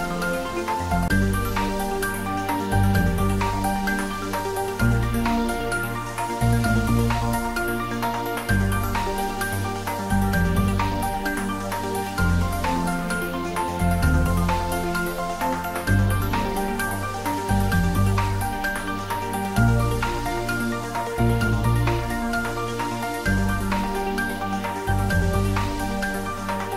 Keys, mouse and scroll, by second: 0.4-1.3 scroll down 1, 2.6-4.8 drag, 6.7-7.1 scroll up 1, 7.1-8.3 middle drag, 9.1 click, 11.2 g, 14.2 click, 15.0 s, 17.2 click, 17.5-17.9 scroll down 1, 17.9-19.7 middle drag, 19.9-21.7 scroll down 1.